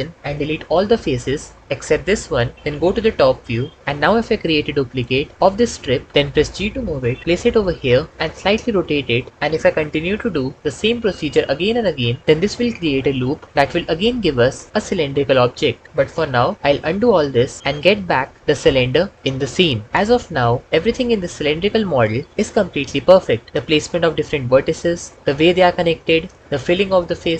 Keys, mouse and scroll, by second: 0.5 x, 3.2 KP_7, 5.3 shift+d, 7.2 g, 16.5 ctrl+z, 16.7 ctrl+z, 16.9 ctrl+z, 17.1 ctrl+z, 17.6 ctrl+z, 17.7 ctrl+z, 23.8 1.